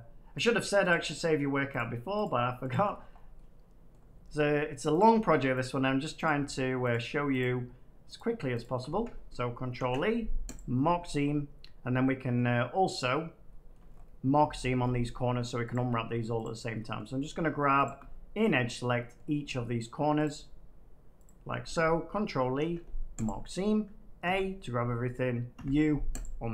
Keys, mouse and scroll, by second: 1.3 shift+middle click, 1.7 shift+click, 3.0 middle click, 3.6 middle click, 3.8 scroll, 4.9 shift+click, 5.5 middle click, 5.5 shift+click, 9.7 ctrl+e, 10.5 click, 12.3 middle click, 13.3 middle click, 13.7 shift+middle click, 13.8 middle click, 15.6 click, 16.3 click, 16.9 middle click, 17.8 shift+click, 18.0 scroll down 4, 19.1 middle click, 19.7 middle click, 20.2 shift+click, 21.2 shift+click, 22.5 ctrl+e, 23.2 click, 24.2 a, 25.5 u, 26.1 click.